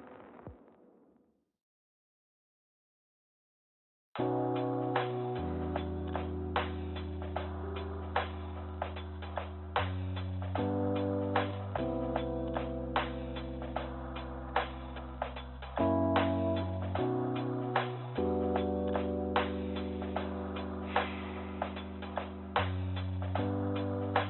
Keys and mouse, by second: 1.3 g, 5.4-7.1 drag, 7.8 g, 10.0-11.6 drag, 13.0 click, 13.4 click, 14.1 click, 18.1 KP_0.